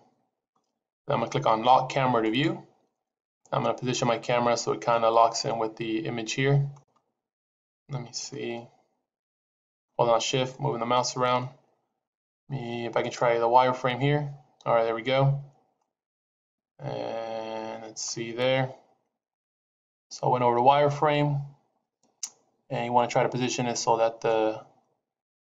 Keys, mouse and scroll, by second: 2.1 click, 3.3 middle click, 7.4 middle click, 8.5 shift+middle click, 10.4 middle click, 13.7 click, 15.6 middle click, 24.1 middle click.